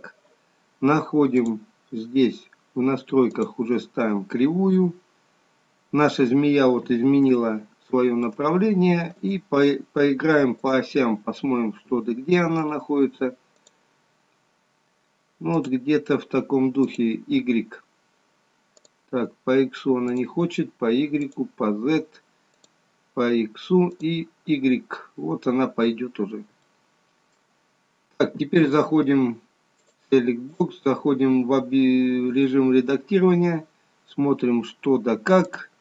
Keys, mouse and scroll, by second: 1.6 click, 5.4-5.8 scroll down 4, 7.6 shift+middle click, 9.3 click, 10.9 click, 13.8 click, 19.0 click, 20.4 click, 21.4 click, 22.7 click, 24.2 click, 25.3 scroll up 1, 26.9 shift+middle click, 26.9 scroll up 2, 30.7 click, 33.7 scroll up 2, 34.2-34.7 scroll down 2, 34.7 scroll up 2, 35.5 click.